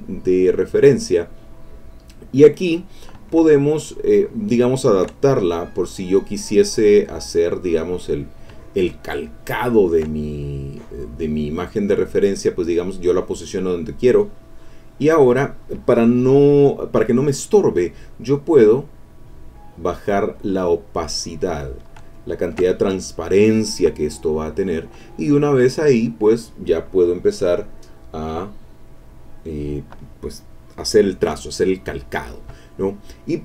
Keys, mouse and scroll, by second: 4.0-5.1 shift+drag, 5.2-8.3 shift+drag, 9.1-10.1 shift+drag, 10.2-11.3 shift+drag, 12.1 click, 13.8 click, 18.6-21.9 drag, 22.1 ctrl+click, 22.8 ctrl+click, 23.1-23.6 scroll down 2, 23.6-24.2 scroll down 2, 24.2 scroll down 1, 28.2 click, 28.8 click, 29.1-29.6 scroll up 2, 29.6 click, 32.6 click.